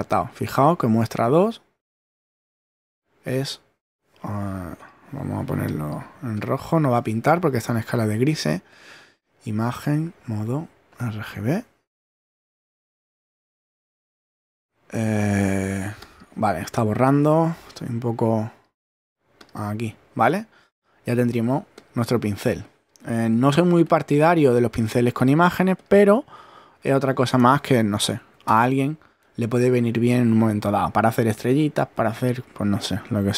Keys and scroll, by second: 23.3 super+z, 28.2 super+a, 28.5 super+BackSpace.